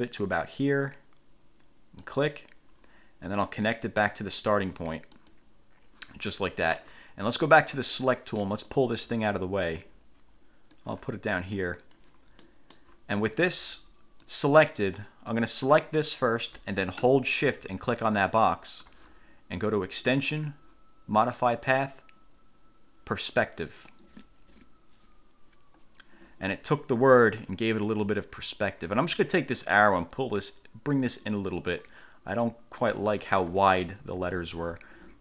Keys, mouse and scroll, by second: 2.1 click, 5.3 click, 7.7 click, 8.9-10.1 drag, 10.9-12.3 drag, 12.6 click, 13.3-14.6 drag, 15.5 click, 18.3 shift+click, 20.1 click, 23.8 click, 27.3-28.5 drag, 30.1-33.1 drag, 34.3 ctrl+z.